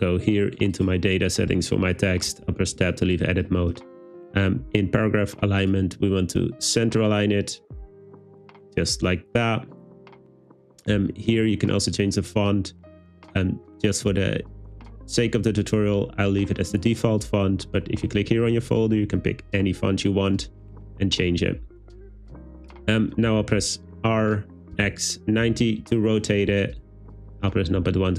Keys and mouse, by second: 2.5 Tab, 3.8 click, 5.7-7.2 drag, 10.8 click, 23.3 r, 24.8 x, 25.5 9, 25.5 0, 25.8 Return, 26.5 `.